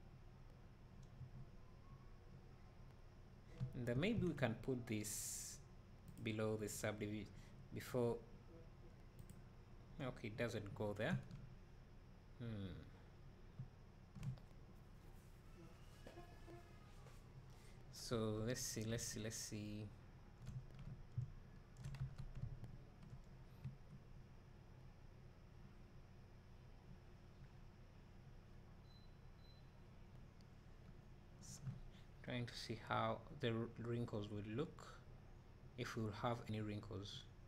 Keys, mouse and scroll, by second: 1.2 space, 11.3 `, 11.7 middle click, 11.9 middle click, 12.1 middle click, 12.3 middle drag, 13.6 middle click, 18.1 Tab, 20.3 middle click, 20.3 `, 22.0 Tab, 23.6 space.